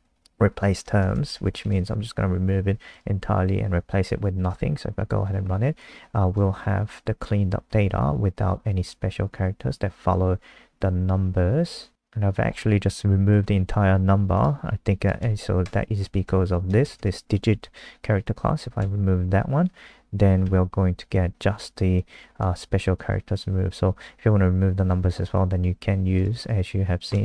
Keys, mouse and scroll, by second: 0.0-1.3 typing, 1.7 ctrl+s, 2.9 click, 3.7 Up, 4.5 F5, 5.8 click, 15.6 Right, 16.7 BackSpace, 16.8 BackSpace, 17.0 BackSpace, 18.8 ctrl+s, 20.4 F5, 21.9 click, 26.5 ctrl+z.